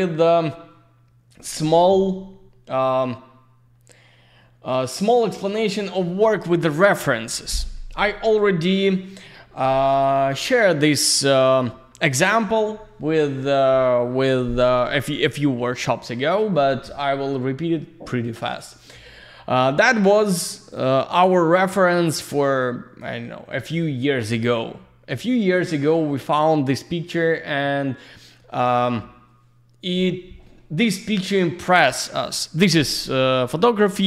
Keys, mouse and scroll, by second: 7.1 click, 22.1 click.